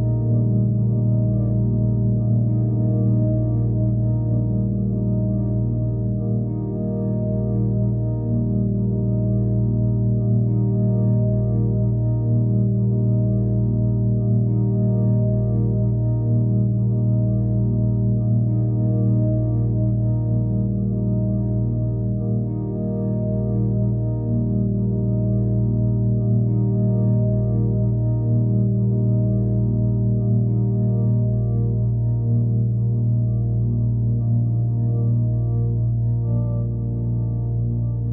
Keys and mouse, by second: 0.0 click, 1.3-3.0 alt+drag, 3.4 click, 4.5 click, 4.8 click, 6.0 ctrl+alt+click, 7.3 click, 8.2 middle click, 9.1 click, 9.7 ctrl+alt+click, 12.3 shift+click, 14.1 click, 14.8 alt+click, 16.3-17.3 drag, 18.8 right click, 19.5 click, 20.4 right click, 21.0 click, 23.8 click, 24.3 click, 26.9 shift+click, 28.0 alt+click, 28.9 click, 29.8 click, 33.3-34.2 middle drag, 35.5 Escape, 37.4 click, 37.9 click.